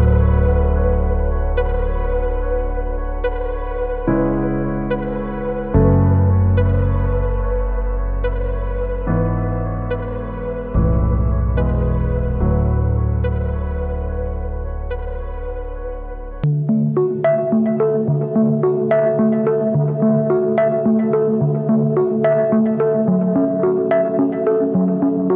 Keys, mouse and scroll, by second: 9.7 ctrl+=, 9.9 ctrl+=, 10.4 ctrl+=, 10.9 space, 16.1 alt+BackSpace, 18.3 ctrl+d, 21.8 alt+click, 24.0 ctrl+t.